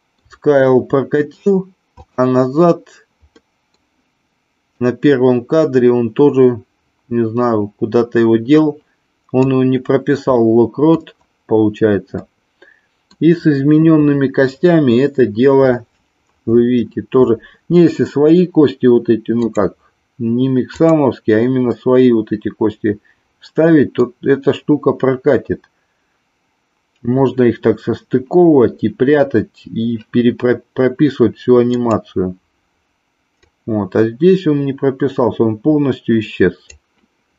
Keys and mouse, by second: 2.0 click, 3.4 middle click, 4.8-9.5 drag, 10.4 middle click, 12.1 middle click, 20.7 click, 21.7-24.0 middle drag, 31.8 click, 33.5-36.6 drag.